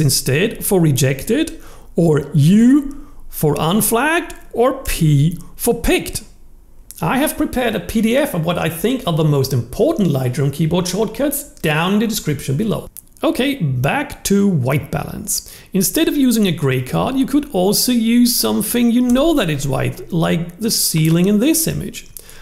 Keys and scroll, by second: 2.4 u, 4.8 p, 19.0 w.